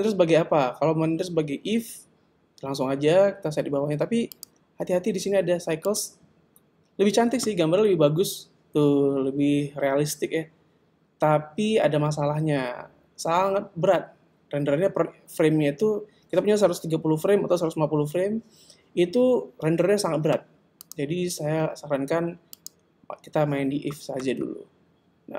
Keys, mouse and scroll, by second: 4.3 click, 20.8 click.